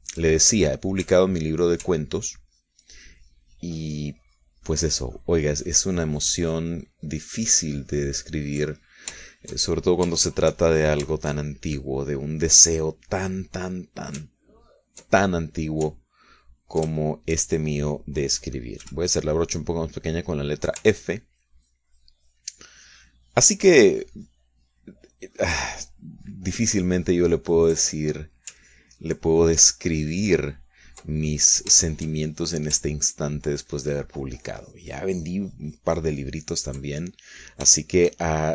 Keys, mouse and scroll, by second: 0.1-2.0 shift+drag, 2.4 ctrl+click, 3.3-9.8 ctrl+drag, 9.9 ctrl+shift+middle click, 10.4-12.2 ctrl+shift+middle drag, 12.3-14.3 shift+middle drag, 14.4 middle click, 15.3 ctrl+click, 15.8 ctrl+click, 17.0-18.1 ctrl+drag, 18.1 ctrl+shift+click, 20.0 f, 21.2 click, 22.1-29.6 ctrl+drag, 29.8-32.1 ctrl+drag, 32.3 ctrl+click, 33.0 shift+click, 34.2-38.0 ctrl+drag, 38.1 ctrl+middle click.